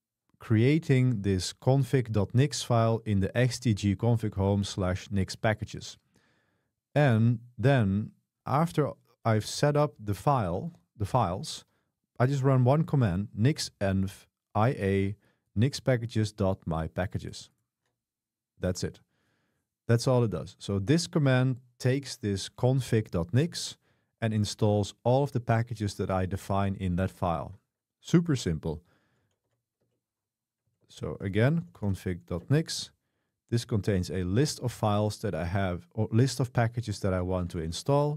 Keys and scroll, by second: 11.6 typing, 12.9 typing, 29.0-32.3 typing, 32.4 Return, 33.8 k, 36.9-38.1 typing.